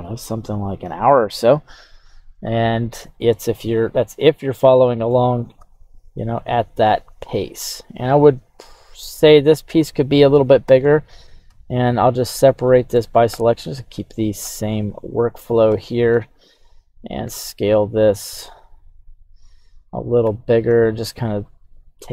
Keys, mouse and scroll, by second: 2.5-3.0 scroll down 1, 3.9-5.1 middle drag, 5.6 e, 9.6 click, 10.6 l, 11.4 o, 12.6 middle click, 13.3 KP_7, 14.4 Tab, 14.9 right click, 15.7 g, 16.1 x, 16.9 click, 17.2 s, 17.4 x, 19.7 click, 20.2 g, 20.6 x, 21.4 click.